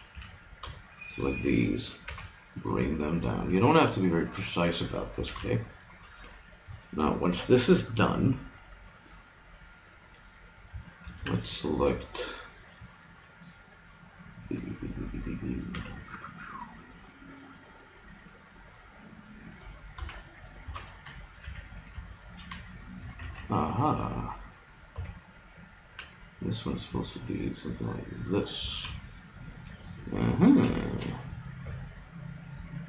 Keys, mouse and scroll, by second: 0.2 a, 0.7 b, 2.1 g, 5.2 a, 5.7-8.4 middle drag, 11.1 ctrl+Tab, 15.7 b, 20.1 z, 20.7 z, 21.5 a, 22.1 click, 22.7 middle click, 23.3 ctrl+Tab, 24.9 b, 26.0 g, 28.7 a, 31.7 b.